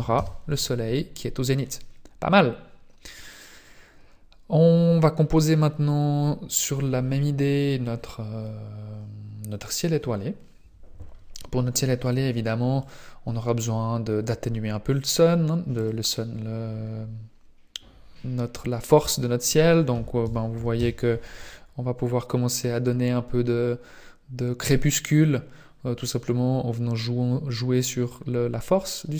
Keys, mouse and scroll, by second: 0.1 click, 5.2-5.8 scroll down 1, 5.8 scroll down 2, 12.0 click, 15.7 click, 18.9 click, 24.8-26.5 scroll up 2.